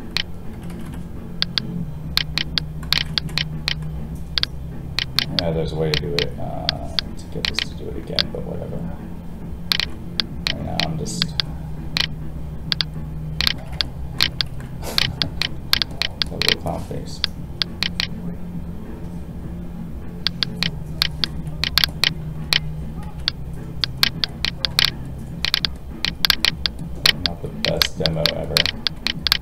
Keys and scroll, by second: 23.0 alt+a.